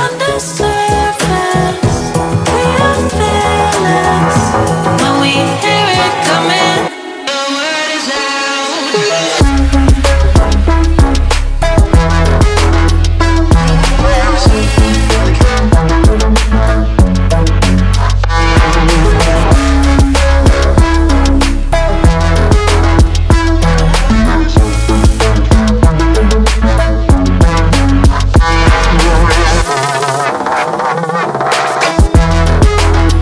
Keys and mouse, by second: 0.3 ctrl+middle click, 1.1 middle click, 6.9 right click, 7.6-8.7 middle drag, 9.8 middle click, 11.5 shift+middle click, 12.6 ctrl+middle click, 14.4 middle click, 17.4 KP_1, 20.3 shift+middle click, 21.8 ctrl+middle click, 26.9 click, 28.7 click.